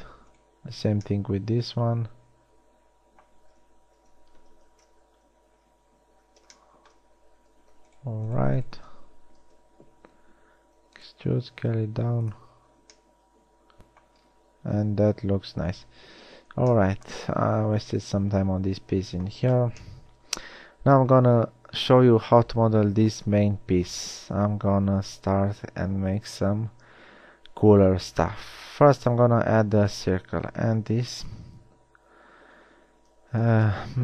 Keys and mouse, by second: 3.8 a, 5.2 ctrl+z, 6.0 z, 6.5 z, 9.9 KP_3, 11.3 e, 11.8 s, 13.3 Tab, 16.2 KP_1, 21.4-22.3 middle drag, 24.1 a, 27.2 a, 32.6 r.